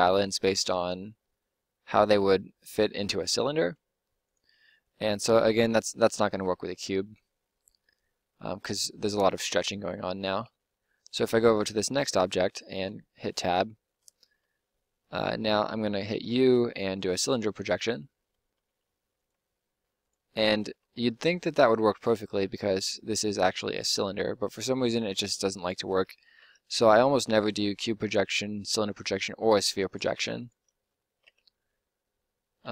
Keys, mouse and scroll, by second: 3.9 g, 4.5 s, 5.2 g, 10.2 Tab, 12.7 Tab, 16.1 u, 18.5 s, 19.3 g, 20.7 Tab, 25.1 Tab, 26.3 u, 30.1 Tab, 31.3 u.